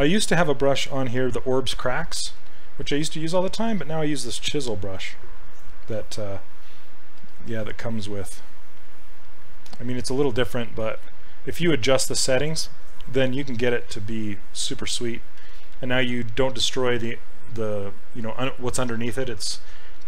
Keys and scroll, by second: 2.5 s, 10.9 ctrl+z, 11.6 s, 15.4 ctrl+z.